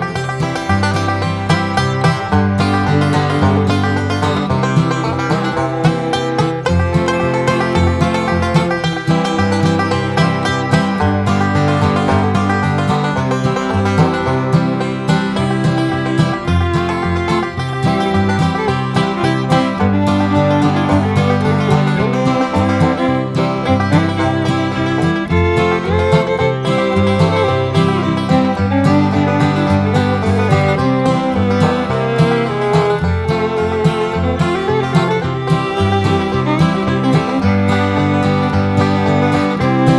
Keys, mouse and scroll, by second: 0.5 click, 2.2 click, 3.2-4.6 typing, 6.4 click, 8.0 click, 9.5 9, 10.8 click, 12.6 click, 13.3 click, 13.8-14.1 scroll down 2, 14.9 click, 15.4 right click, 16.2 click, 17.9-20.9 drag, 21.6 click, 23.2 0, 24.0 scroll down 2, 24.5 scroll up 2, 25.5 click, 26.7 click, 28.3 click, 30.9 click, 31.9 click, 34.8 right click, 35.9 click, 38.0-39.3 drag, 39.9 click.